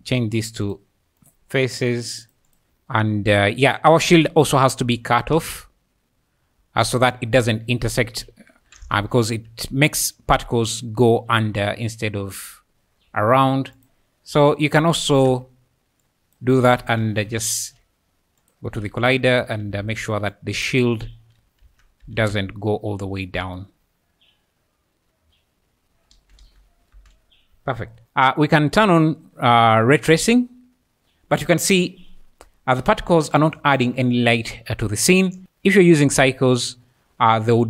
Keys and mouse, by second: 0.6-1.4 drag, 2.6-6.2 typing, 7.7-8.6 `, 9.0 z, 9.5 `, 10.2 `, 11.5 `, 13.1 `, 13.8 click, 14.3 KP_1, 15.3 Tab, 16.0 click, 16.8 3, 17.4 Tab, 19.4 Tab, 19.8 alt+z, 21.4 x, 21.7 Tab, 22.0 z, 22.3-23.4 `, 23.7 alt+a, 23.7 space, 26.1 space, 26.4 space, 26.9 space, 28.0 alt+a, 28.8 click, 33.5 `, 35.4-37.5 drag.